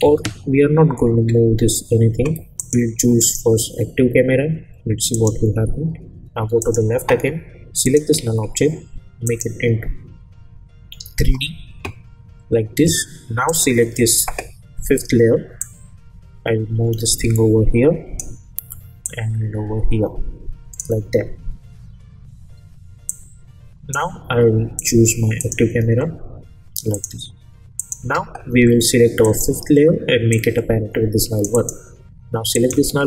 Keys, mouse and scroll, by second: 0.0 ctrl+z, 2.6 click, 3.3 click, 6.7 click, 13.0 -, 13.5-18.4 drag.